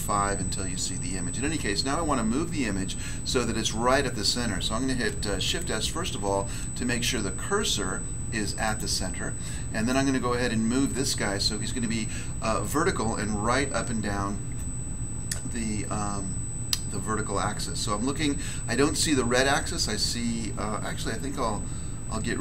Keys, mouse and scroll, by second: 5.4 s, 8.6 click, 21.5 3, 22.1 1.